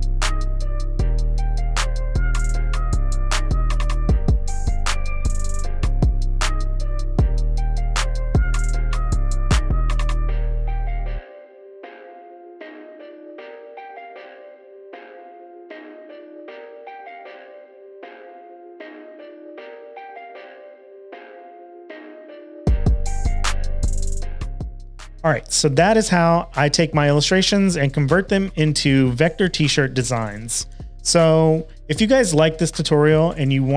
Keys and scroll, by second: 2.6 super+v, 4.5 Return, 5.5 super+s, 6.7 super+w, 8.9-11.2 typing, 16.2 typing, 24.7 typing.